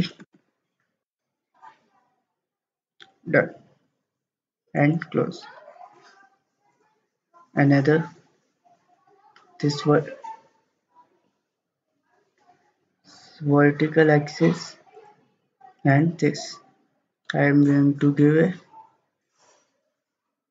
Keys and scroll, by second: 0.0-0.7 typing, 1.0 Return.